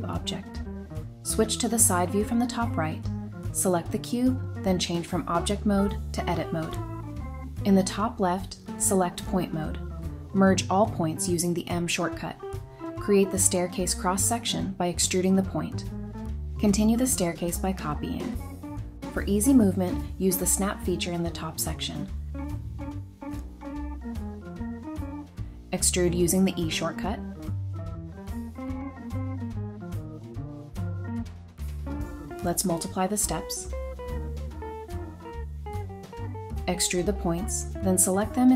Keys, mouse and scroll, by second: 0.9 middle click, 2.3 scroll up 1, 2.9 Tab, 7.8 typing, 8.8 scroll up 1, 9.5-10.3 typing, 11.8 typing, 12.2 Return, 12.7 scroll up 1, 13.4 typing, 14.6-15.8 typing, 16.0 Return, 17.0-18.2 typing, 18.9 Escape, 20.8-22.1 typing, 23.1-24.4 typing, 23.5-23.9 scroll down 1, 24.3 middle click, 26.3-27.2 typing, 30.1-31.0 typing, 32.3 typing, 32.9-33.3 scroll down 1, 33.4 middle click, 36.3 scroll up 1, 36.8 typing, 38.0 typing.